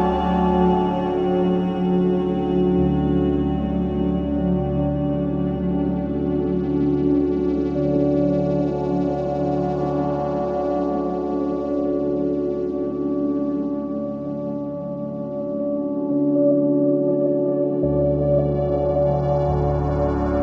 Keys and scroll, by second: 5.7 ctrl+d.